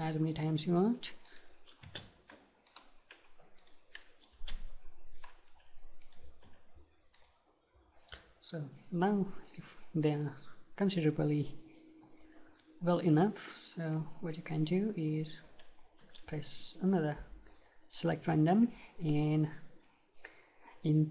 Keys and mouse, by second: 1.0 Delete, 1.9 space, 3.2 Delete, 4.4 space, 6.5 Delete, 9.6-11.6 middle drag, 13.5-16.0 middle drag, 16.0 space, 18.7-20.6 middle drag.